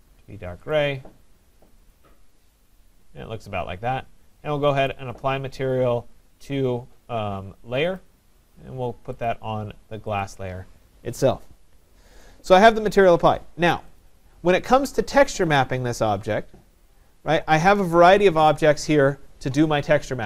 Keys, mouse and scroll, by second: 0.7 click, 1.9 click, 4.9 right click, 8.0 click, 9.3 right click, 10.2 click, 12.2 click, 14.1 click, 16.3 click, 17.0 click, 18.0 middle click, 18.1 middle click, 18.2 middle click, 18.2 middle click, 18.4-19.1 scroll.